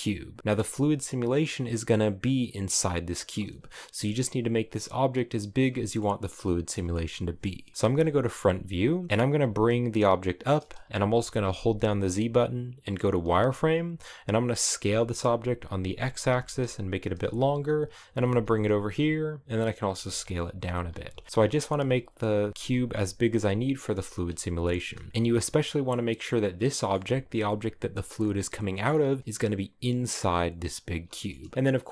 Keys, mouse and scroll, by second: 0.0 scroll down 2, 0.2-3.5 middle drag, 3.5 s, 5.4-7.7 middle drag, 7.7 KP_1, 8.2-8.9 scroll up 2, 8.9 s, 9.1 g, 11.1 z, 14.3 s, 17.7 g, 19.0-23.6 typing, 24.3 shift+middle click, 24.6 scroll up 3, 24.9 g, 26.4-29.3 shift+middle drag, 29.3 right click, 30.8 shift+middle click, 31.4-31.9 right drag.